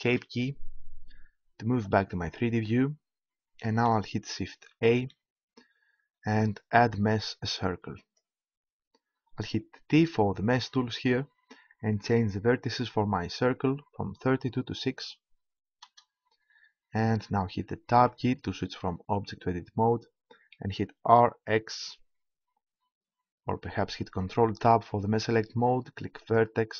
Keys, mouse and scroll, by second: 4.9 shift+a, 9.9 t, 13.5-15.3 drag, 17.9 Tab, 21.1 r, 21.1 x, 24.3 ctrl+Tab.